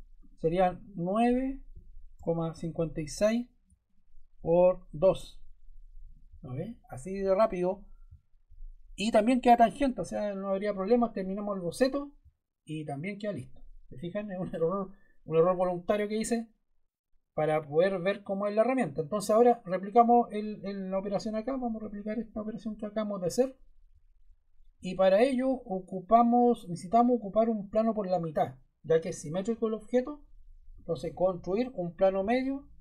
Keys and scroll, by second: 1.4-3.0 typing, 4.8 2, 5.0 Return.